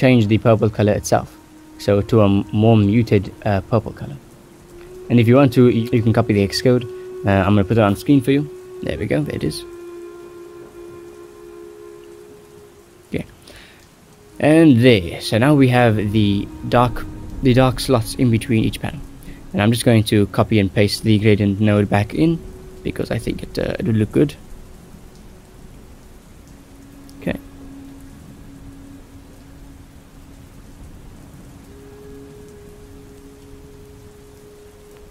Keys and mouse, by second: 0.0 right click, 0.3 right click, 1.3 drag, 1.3 g, 1.9 click, 2.4 click, 3.0 click, 3.7 ctrl+s, 5.1 click, 5.9-6.9 drag, 7.2 click, 8.2 middle click, 9.7 middle click, 10.3 middle click, 10.9-12.1 drag, 12.9 shift+middle click, 13.7 click, 15.7-18.8 drag, 20.8 shift+middle drag, 22.4 middle click, 22.8 ctrl+s, 23.1 click, 23.6 middle click, 23.8 right click, 24.1 right click, 25.2 ctrl+c, 25.9 right click, 26.2 right drag, 26.8 ctrl+v, 27.7 click, 27.9-29.0 drag, 29.5-31.0 drag, 31.4 middle click, 31.8 click, 32.4 g, 33.7-34.9 drag.